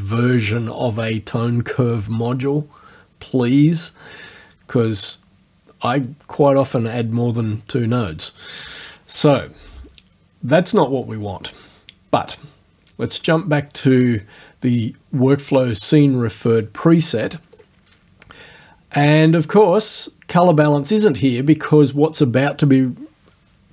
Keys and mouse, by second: 10.7 click, 11.1 click, 13.1 click, 17.6 click, 19.8 click.